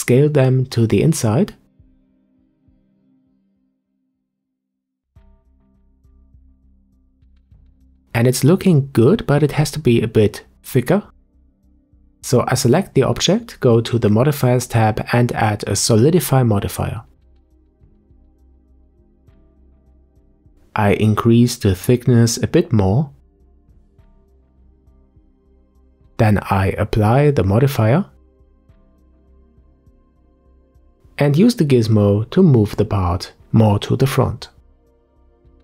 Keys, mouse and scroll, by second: 1.1-1.5 scroll down 1, 1.5-3.9 middle drag, 3.9-5.4 scroll up 2, 5.4-7.0 middle drag, 7.0-7.5 scroll up 1, 7.5-10.1 middle drag, 10.1 Tab, 13.5 click, 14.6-17.8 drag, 20.0-22.3 middle drag, 22.3-25.3 drag, 26.5-28.8 drag, 29.2-30.7 scroll down 4, 30.7-31.1 scroll down 1, 31.1 click, 31.6-32.6 scroll up 2, 32.6 click, 35.2-35.6 middle drag.